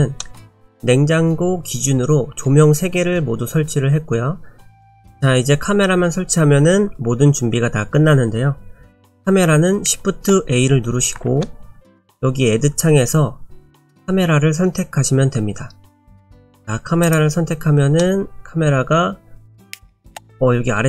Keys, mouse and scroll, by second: 0.2 middle click, 4.7 right click, 4.7 middle click, 4.7 scroll up 1, 4.9 shift+middle click, 11.3 shift+a, 18.0 middle click.